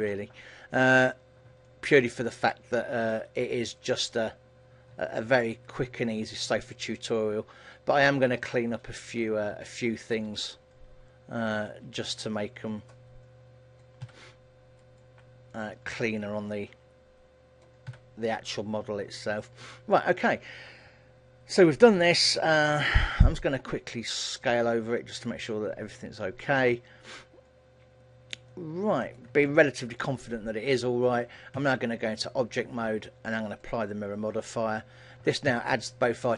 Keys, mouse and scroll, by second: 1.1-1.7 scroll up 2, 1.9 middle click, 3.0 alt+right click, 3.8 alt+right click, 5.7 alt+shift+right click, 6.9 KP_3, 8.2 scroll down 2, 8.9 KP_1, 9.9 shift+middle click, 11.8 click, 14.1 a, 14.9 alt+right click, 15.6 click, 18.0 a, 18.4-19.5 scroll down 1, 19.5-20.0 scroll down 2, 19.8 middle click, 28.6 middle click, 29.6 shift+middle click, 31.7 Tab, 33.7 click, 35.0-35.6 scroll down 3, 35.6 Tab, 36.0 middle click.